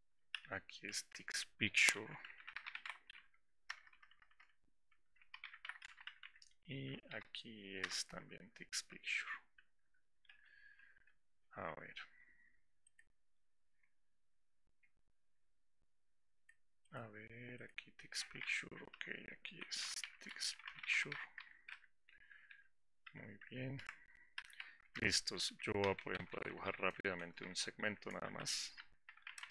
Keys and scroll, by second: 7.2 ctrl+f.